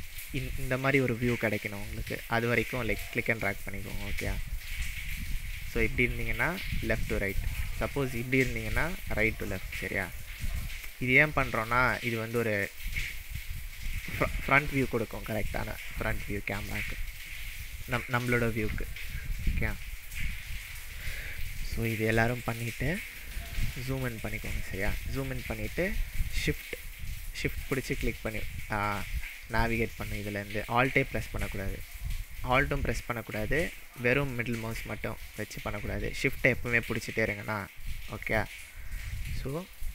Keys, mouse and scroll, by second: 2.5-4.1 scroll down 2, 5.0-5.9 middle drag, 22.5-23.3 scroll up 5, 23.7-25.1 shift+middle drag, 25.6-26.6 shift+middle drag, 27.0-27.3 shift+middle drag, 27.7-29.8 shift+middle drag, 39.0-39.9 scroll up 5.